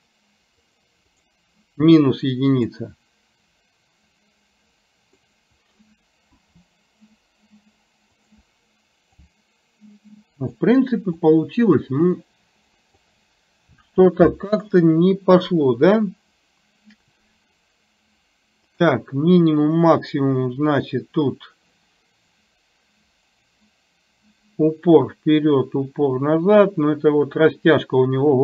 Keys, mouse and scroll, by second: 0.6 click, 1.2 click, 2.8-5.2 drag, 9.4-10.7 drag, 11.2-13.1 drag, 14.2 ctrl+z, 18.8 click, 22.3-28.4 drag.